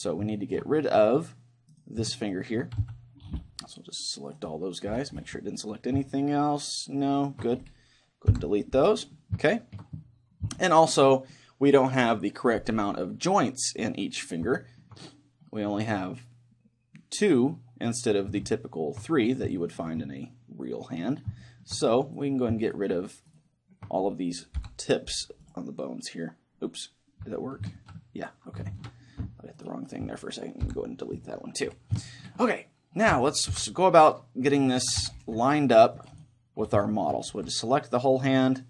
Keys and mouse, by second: 1.7-6.9 right drag, 2.8 c, 5.4-6.9 middle drag, 6.9 click, 7.2-8.3 middle drag, 8.3 Delete, 9.5-13.0 middle drag, 14.6-16.9 middle drag, 18.6-23.3 middle drag, 22.2-25.2 right drag, 25.2 Delete, 27.8 ctrl+z, 28.8 ctrl+shift+z, 29.6-31.6 right drag, 30.6 Delete, 32.0-34.6 middle drag, 33.5 KP_1, 34.6-38.2 right drag, 35.0 a, 35.0 c, 36.9 middle click, 37.3 g.